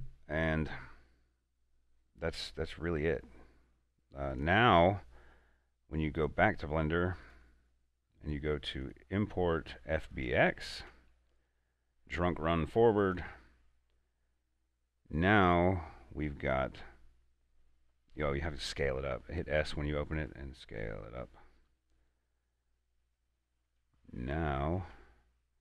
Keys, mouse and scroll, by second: 4.5 click, 13.1 click, 19.8 s, 23.9 click, 24.7 a, 25.1 Tab.